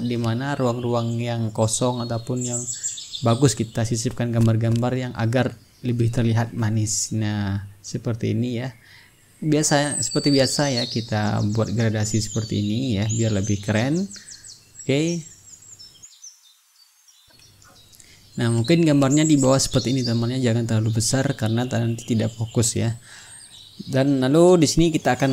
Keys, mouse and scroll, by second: 0.1-2.5 drag, 4.3 click, 5.2 click, 8.1 click, 10.0-12.7 drag, 13.7-16.2 drag, 16.3 click, 16.4 click, 16.8 click, 16.9 click, 17.2-23.3 drag, 19.7-23.3 right drag, 24.1 click, 25.1 click.